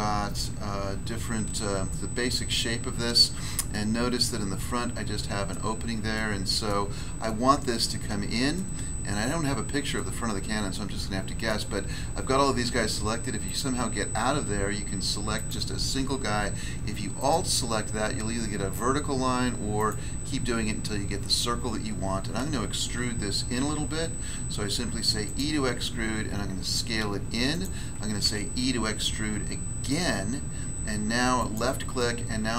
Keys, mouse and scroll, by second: 0.6-2.1 scroll down 2, 2.1 scroll up 1, 3.7 middle click, 5.5 middle click, 6.1 middle click, 7.3 middle click, 8.9 scroll up 1, 9.4-9.9 scroll up 1, 9.9 middle click, 11.5 middle click, 13.4 right click, 15.4 right click, 15.5 right click, 17.2 alt+right click, 19.8 alt+right click, 23.6 e, 25.2 click, 26.1 s, 27.5 click, 28.2 e, 31.4 click, 31.9 middle click.